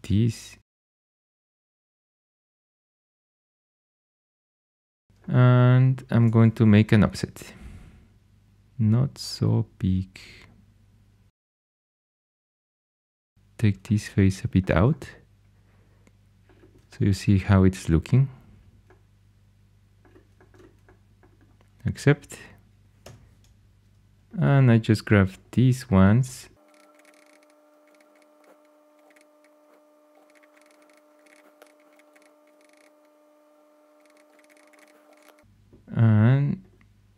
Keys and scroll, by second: 6.7 o, 11.3 3, 22.9 2, 29.0 shift+super+e, 30.1 shift+super+e, 35.0 shift+super+e.